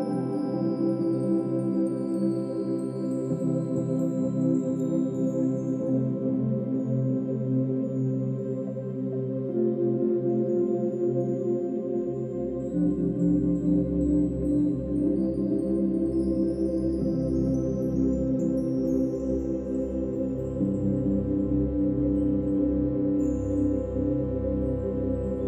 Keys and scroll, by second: 13.7 space, 15.0 space, 15.2 ctrl+-, 15.3 ctrl+=, 15.7 space.